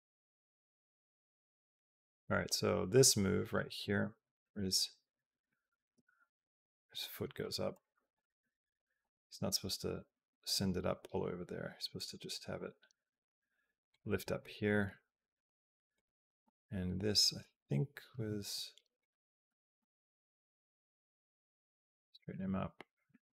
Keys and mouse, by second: 4.1 Up, 5.0 Down, 5.7 a, 7.3 Up, 7.6 Up, 8.0 Up, 8.9 Up, 10.0 Up, 12.4 g, 16.3 g, 18.8 click, 19.3 r, 22.1 click, 22.2 g, 23.2 click.